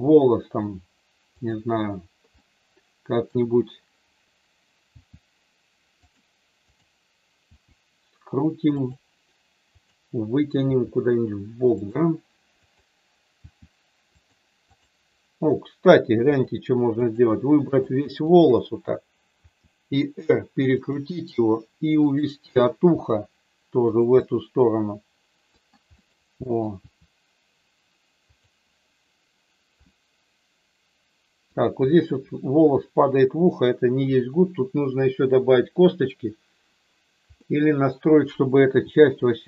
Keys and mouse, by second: 2.4 middle click, 4.8 r, 6.0 click, 6.7 click, 7.5 r, 8.7 click, 9.8 click, 10.6 r, 11.7 click, 12.6 click, 13.5 r, 14.1 click, 14.7 click, 17.0 shift+click, 17.6 shift+click, 18.2 shift+click, 19.5 r, 20.7 click, 22.0 click, 23.0 r, 24.2-25.5 middle drag, 26.8 r, 28.2 click, 29.7-31.5 middle drag, 32.7 middle click, 37.5 middle click, 38.8 r.